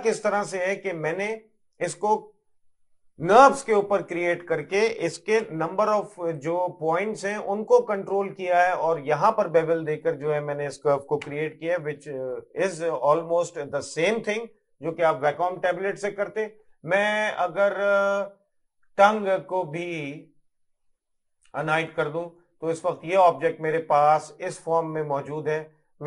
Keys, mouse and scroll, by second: 0.5 middle click, 5.5 Tab, 6.2 middle click, 11.3 Tab, 11.9 middle click, 21.8 click, 22.5 middle click, 24.0 middle click, 24.8 middle click.